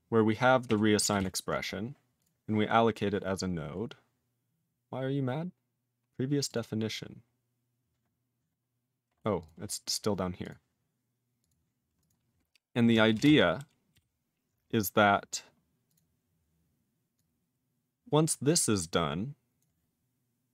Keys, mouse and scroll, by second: 0.6 ctrl+e, 1.2 ctrl+s, 2.2 click, 2.2 click, 3.8 scroll down 3, 6.5 click, 6.5 click, 7.2 scroll up 3, 8.6-9.4 scroll down 6, 9.4 click, 9.5 click, 9.7 scroll down 4, 10.4 click, 10.5 click, 11.4 click, 11.5 click, 12.0 click, 12.1 click, 13.1 ctrl+space, 13.1 ctrl+p, 13.2 ctrl+a, 13.6 ctrl+g, 13.9 ctrl+e, 15.9 click, 15.9 click, 17.1 click, 19.6 click.